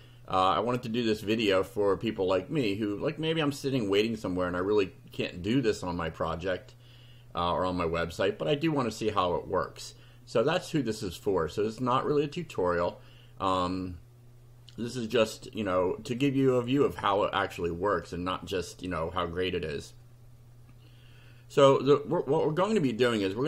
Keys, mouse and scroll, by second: 1.2 click, 16.2 click, 23.0 click.